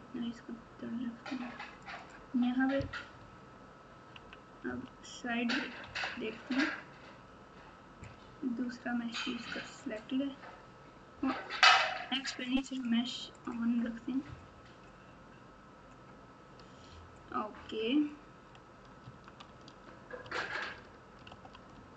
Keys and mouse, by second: 3.1 Tab, 4.1 KP_1, 4.6 KP_3, 5.8 KP_9, 9.7 click, 12.6 click, 13.3 click, 19.0 Tab, 20.2 Tab, 21.2 alt+z.